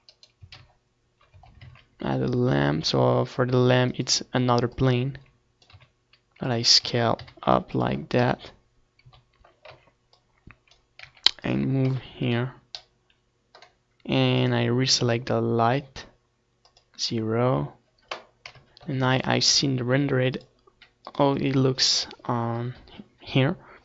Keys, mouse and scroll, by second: 2.7-4.2 drag, 3.7 s, 4.5-7.4 drag, 4.7 s, 6.2 KP_3, 7.0 KP_1, 7.6 z, 8.2-11.2 drag, 9.0 r, 9.8 KP_0, 10.2 z, 16.4 KP_0, 17.0 ctrl+s, 17.3 middle click, 18.2-19.9 drag.